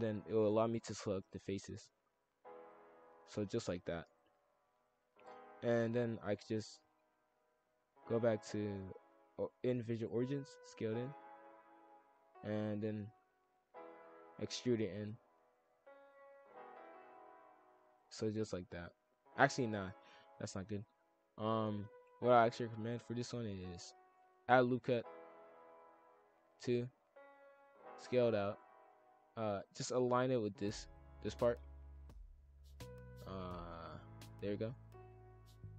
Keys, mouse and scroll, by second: 0.3 click, 1.4 shift+click, 1.5 shift+f, 2.8 shift+click, 3.0 shift+f, 4.4 shift+click, 4.5 shift+f, 5.9-6.3 scroll down 1, 6.3 scroll up 1, 6.6-8.0 middle drag, 8.0-9.8 drag, 9.8 e, 10.2 s, 11.5 shift+f, 13.5-15.4 drag, 15.4 e, 15.8 s, 16.9 shift+f, 19.4 ctrl+z, 19.6-20.4 ctrl+z, 20.6 ctrl+z, 20.8 ctrl+z, 21.1 ctrl+z, 21.3 ctrl+z, 22.2 shift+f, 24.3 ctrl+r, 27.4 s, 30.0 shift+f, 32.2 shift+f, 33.2 s, 34.6 shift+f.